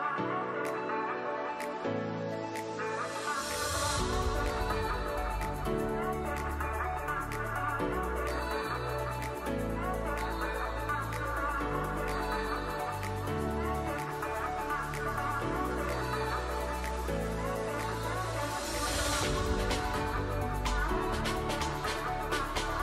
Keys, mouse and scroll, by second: 15.7 click, 16.1-16.7 ], 17.2 ], 22.5 ].